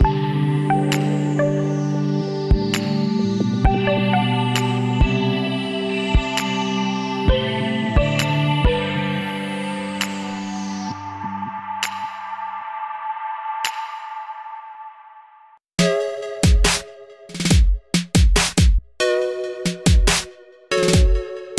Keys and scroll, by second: 7.7-8.7 typing, 17.3-18.2 typing.